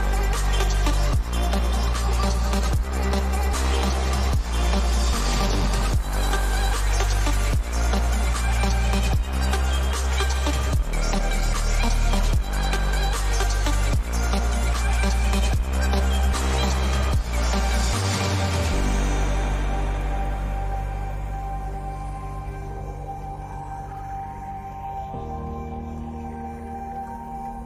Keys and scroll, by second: 9.2 ctrl+=, 15.5 ctrl+j, 20.6 s, 26.3 ctrl+u.